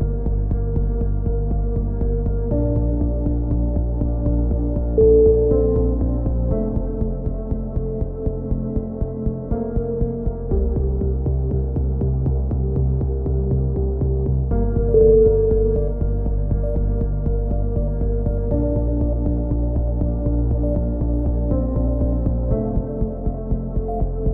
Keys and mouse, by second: 0.0 click, 1.0 click, 2.4-3.6 right drag, 2.8 click, 3.6 click, 5.0-6.3 right drag, 5.8-7.0 middle drag, 7.0 click, 8.2-9.7 middle drag, 11.8-13.6 drag, 13.6 middle click, 14.4-15.8 right drag, 15.7 click, 19.0 right click, 19.3-20.6 drag, 20.9 right click, 21.2 click, 21.7 middle click, 21.9 click, 22.5 a, 22.8-24.3 drag.